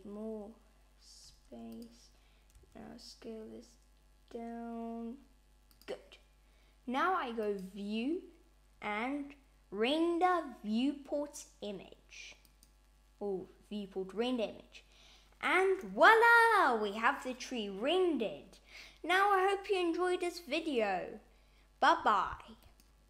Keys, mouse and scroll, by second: 1.5 click, 2.4 s, 7.3 click.